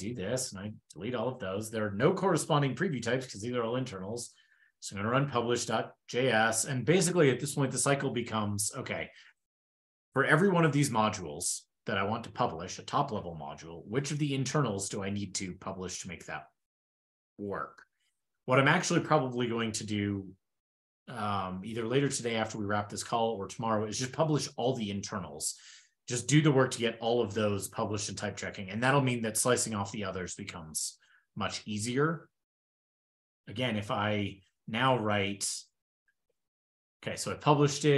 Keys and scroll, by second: 0.3 ctrl+shift+k, 0.8 super+s, 3.1 ctrl+super+Return, 3.5 ctrl+p, 4.0 ctrl+p, 33.0 ctrl+super+Return, 34.5 ctrl+a, 34.6 ctrl+k, 35.7 ctrl+e, 35.9 ctrl+l.